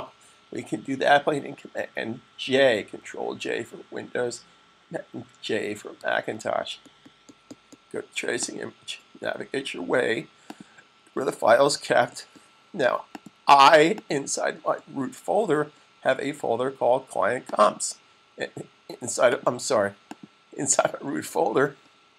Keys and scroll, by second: 5.7 super+j.